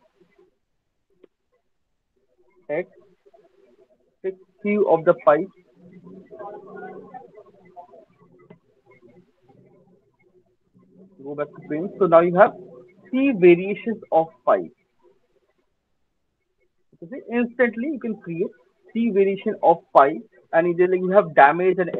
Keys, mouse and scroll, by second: 0.6 alt+middle click, 0.6 alt+click, 1.5 click, 1.9 alt+right click, 2.9 x, 3.5 click, 4.3 click, 7.0 alt+middle click, 7.4 click, 8.4 click, 10.4 click, 11.5 alt+right click, 12.0 alt+right click, 12.4 alt+middle click, 12.6 alt+click, 14.6 click, 15.1 alt+middle click, 17.2 alt+click, 17.6 alt+middle click, 18.0 alt+middle click, 18.2 alt+click, 18.2 alt+right click, 18.7 alt+right click, 19.3 alt+middle click, 19.6 alt+right click.